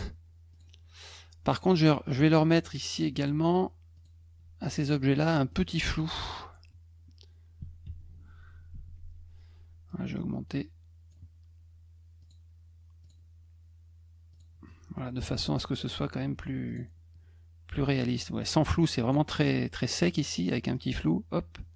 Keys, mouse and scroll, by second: 0.5 click, 1.5 click, 2.9 click, 3.9 click, 4.6 click, 5.5 middle click, 5.9 middle click, 8.7 ctrl+shift+f, 9.9-11.1 drag, 12.2 click, 13.0 click, 14.3 click, 16.7 click, 17.9-19.1 drag, 20.7-21.7 drag.